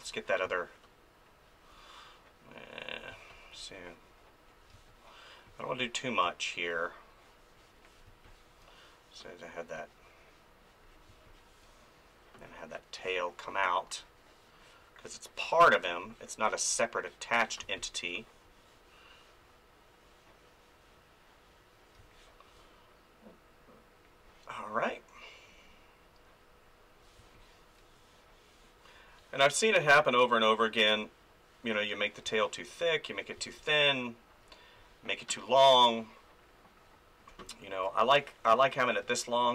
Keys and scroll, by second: 3.1 space, 4.7 space, 8.0 space, 11.1 space, 17.6 space, 22.0 space, 27.2 space, 32.2 space, 39.0 ctrl+z.